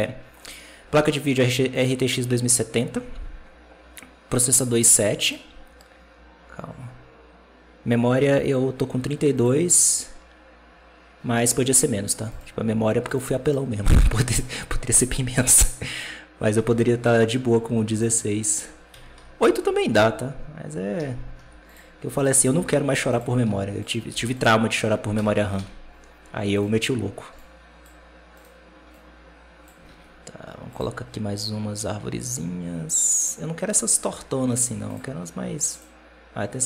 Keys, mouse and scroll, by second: 1.6-4.8 drag, 9.2-12.2 drag, 12.2-13.8 right drag, 13.8 r, 15.9 click, 17.0-18.8 drag, 18.8 KP_Decimal, 19.0 KP_7, 19.8 g, 21.2 g, 22.1 right click, 22.3 g, 23.3 r, 24.0 g, 25.0 KP_0, 25.5 alt+a, 26.4 right click, 27.2-28.3 drag, 28.3-28.8 right drag, 28.8 click, 29.7 alt+a, 30.6-33.8 drag, 35.6-36.6 drag.